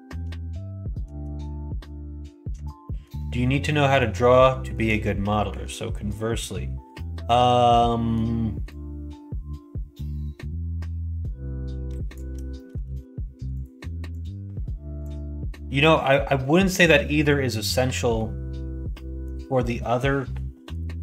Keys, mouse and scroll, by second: 2.8 shift+middle click, 3.6 middle click, 4.4 shift+middle click, 5.4 1, 6.9 middle click, 7.7 middle click, 8.7-12.1 drag, 12.5 middle click, 12.8 alt+z, 13.5 click, 14.1-17.2 drag, 19.0 middle click.